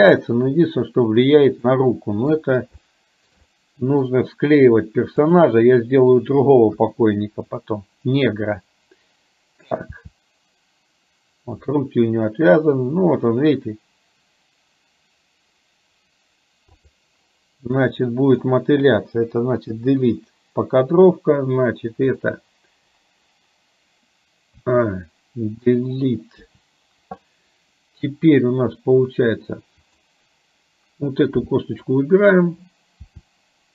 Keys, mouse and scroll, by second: 1.9 middle click, 3.0 shift+middle click, 3.5 middle click, 6.9 KP_1, 10.1 r, 17.9 click, 19.7 Delete, 22.2 click, 24.7 a, 26.5 Delete, 29.9 click, 33.1 r.